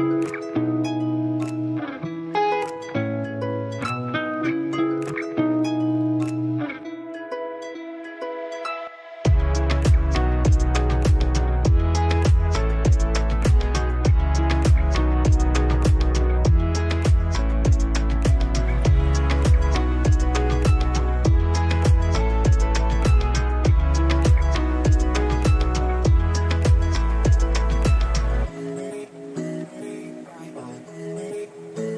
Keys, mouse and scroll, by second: 0.1-4.0 drag, 4.0-4.4 scroll down 1, 6.2-8.0 scroll up 1, 8.8 ctrl+Num_Lock, 8.8-9.3 scroll up 1, 9.3 ctrl+click, 13.8-14.3 scroll up 1, 14.6-16.2 drag, 18.0-20.1 alt+right drag, 20.1-23.6 drag, 23.6 ctrl+space, 23.8 ctrl+click, 24.0 ctrl+space, 25.7-28.6 drag, 28.6 scroll down 1, 29.3 space, 29.8 alt+click.